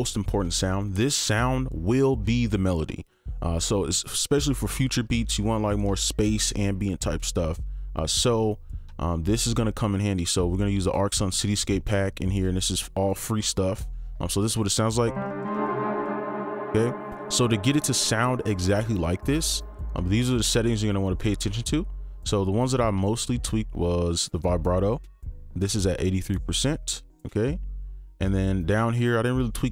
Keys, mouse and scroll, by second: 15.0 typing, 19.9 typing.